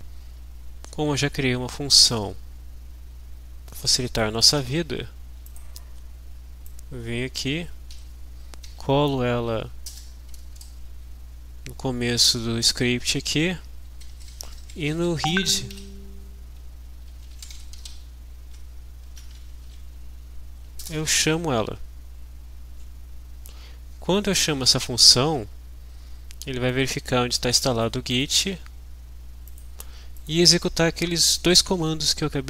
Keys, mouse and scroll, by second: 0.0 alt+Tab, 2.2-4.4 drag, 4.9 ctrl+c, 5.6 click, 6.6-7.9 drag, 7.9 Delete, 8.6 ctrl+v, 9.9 Return, 10.3 BackSpace, 11.2 Up, 12.4 Down, 14.1 Right, 14.5 Left, 15.0 shift+Down, 15.2 shift+End, 15.7 shift+Delete, 16.8-18.3 typing, 19.6 shift+-, 20.8 Return, 26.7-29.0 drag, 29.5 click, 30.2 click.